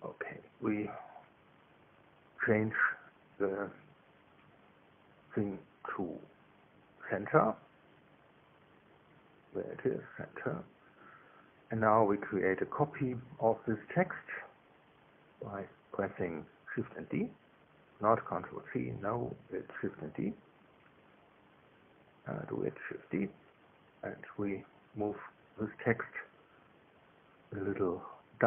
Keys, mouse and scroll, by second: 2.9 click, 4.2-9.6 drag, 10.5 click, 12.6 Tab, 17.6 ctrl+c, 22.9 shift+d, 25.7 right click, 27.0 g.